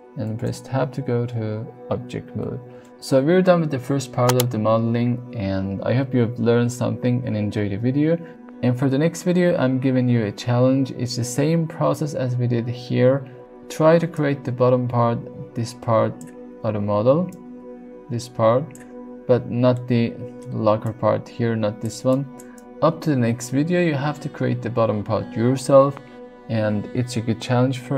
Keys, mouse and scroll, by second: 0.4 Tab, 2.8 shift+middle drag, 8.0 middle click, 14.0-16.2 d, 14.1-16.2 drag, 16.9 d, 17.3-18.8 drag, 18.7 d, 19.9 middle click, 20.6-22.9 typing, 20.9-22.4 drag, 22.5 click.